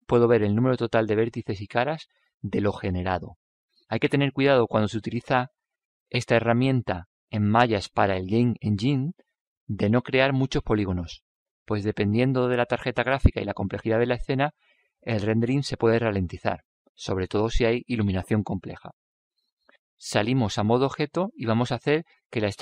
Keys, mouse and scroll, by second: 20.8 Tab, 22.0 n.